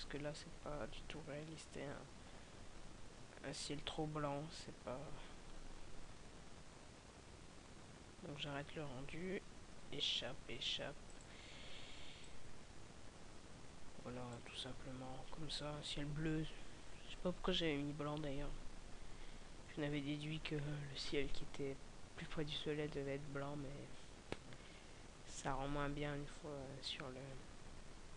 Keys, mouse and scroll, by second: 9.8 Escape.